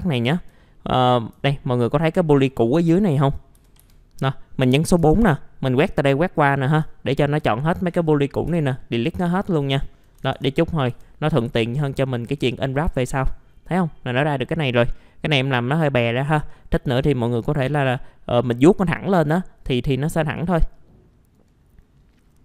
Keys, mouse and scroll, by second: 0.0 click, 0.6 alt+middle click, 1.4 alt+middle click, 2.8 alt+middle click, 3.6 alt+f, 3.8 alt+z, 4.2-5.4 middle drag, 5.9 click, 6.9 alt+middle click, 8.5 Delete, 9.3 alt+middle click, 10.2 alt+1, 10.9 F4, 12.9 alt+middle click, 14.5-16.2 scroll down 1, 16.2 right click, 17.2 click, 17.8 scroll down 1, 17.9 middle click, 20.3-21.4 drag.